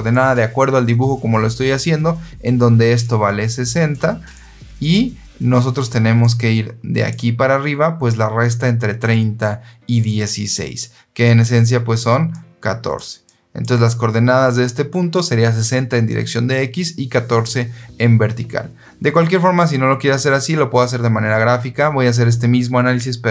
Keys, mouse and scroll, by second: 2.9 click, 4.2 click, 6.1 click, 11.5 click, 12.2 click, 13.1 click.